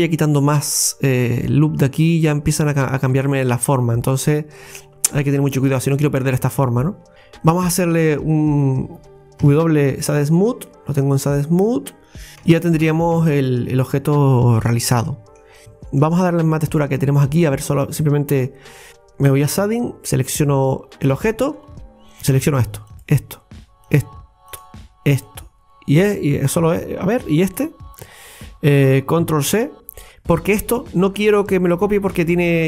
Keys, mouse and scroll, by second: 2.8-3.2 scroll down 5, 3.3-6.3 middle drag, 7.5-7.8 scroll down 4, 9.4 w, 10.8-11.3 scroll up 3, 12.7 Tab, 12.8 Tab, 13.2 Tab, 13.6 scroll up 2, 13.9-14.5 scroll down 5, 14.9 middle click, 15.6 scroll up 4, 15.7 shift+middle click, 18.3 Tab, 18.9 KP_Divide, 19.6 Tab, 20.4 right click, 22.2 click, 22.9 shift+click, 24.4 shift+click, 24.6 shift+click, 27.5 shift+click.